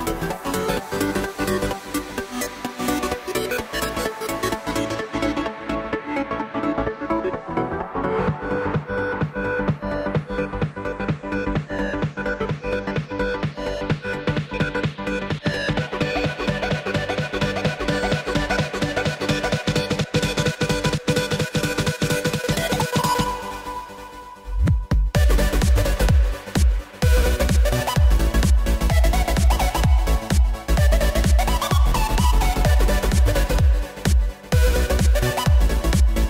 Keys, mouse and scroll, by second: 2.1 Tab, 2.6 click, 2.9 scroll down 2, 3.1-3.6 middle drag, 3.6 scroll up 1, 3.8-4.4 shift+middle drag, 4.4 shift+scroll up 2, 4.9 click, 5.1-5.7 scroll down 1, 5.7 KP_3, 6.4 click, 6.7-8.8 middle drag, 8.8 click, 9.1 click, 12.7 click, 15.0 click, 15.7 click, 17.8 click, 19.1 shift+a, 20.0 KP_1, 20.5 s, 27.2 KP_3, 28.8-29.6 scroll down 1, 29.6 s.